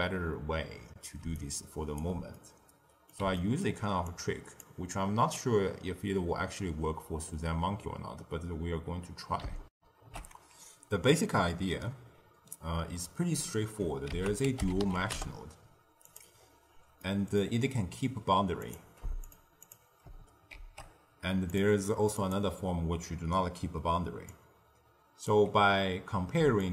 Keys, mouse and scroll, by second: 1.1 d, 1.3 right click, 2.0 d, 2.2-4.0 middle drag, 4.0 click, 9.7 ctrl+alt+shift+q, 14.0 ctrl+a, 16.3-16.9 scroll up 2, 16.9 middle click, 17.4-18.5 scroll up 1, 18.5 click, 19.2 click, 19.5 click, 20.5 shift+d, 22.1 click, 24.2 click, 26.3 d, 26.5-26.7 drag.